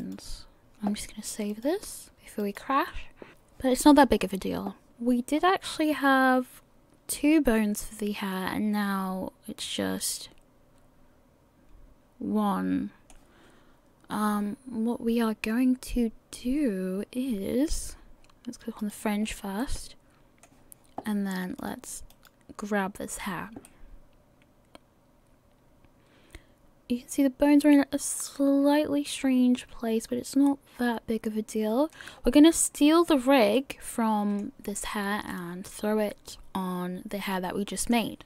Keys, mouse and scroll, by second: 0.6 scroll down 4, 1.5 click, 4.9 shift+middle click, 8.4 middle click, 18.8 click, 19.6 middle click, 21.6 click, 22.1 click, 23.7 middle click, 32.1 scroll up 5, 33.1-33.7 scroll down 4, 33.6 middle click, 35.3 middle click.